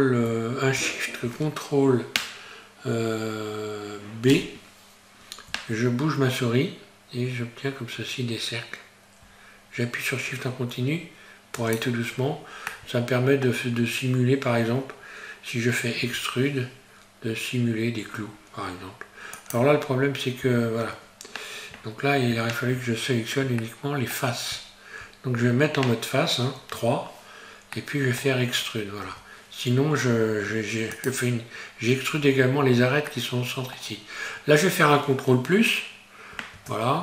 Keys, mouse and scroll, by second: 4.4 ctrl+shift+b, 12.1-12.7 scroll down 4, 12.7 middle click, 13.7-15.2 scroll up 2, 16.0 e, 19.8-20.6 scroll up 2, 20.6-21.0 scroll up 1, 23.7 middle click, 27.8 middle click, 27.8 3, 29.1 e, 33.1 middle click, 34.0-36.2 scroll down 2, 36.6 ctrl+KP_Add.